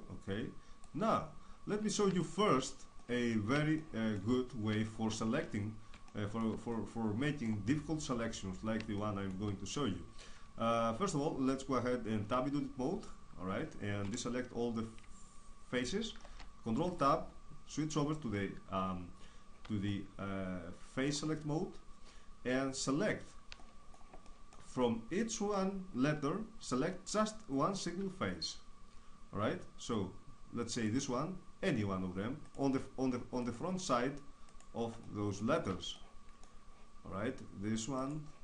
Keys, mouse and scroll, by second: 1.1-4.8 middle drag, 5.1 middle click, 5.2 shift+space, 5.6 middle click, 8.9-11.3 middle drag, 12.3 Tab, 14.1 a, 16.1 ctrl+Tab, 20.2-23.0 middle drag, 23.6-24.8 middle drag, 25.6-29.8 middle drag, 32.2-36.3 right drag, 36.3-38.0 middle drag, 38.0-38.4 right drag.